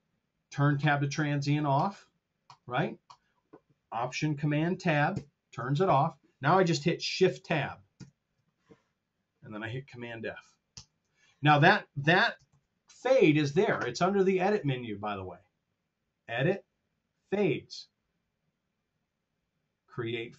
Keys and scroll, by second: 5.0 alt+super+Tab, 7.8 shift+Tab, 10.6 super+f, 12.7 super+..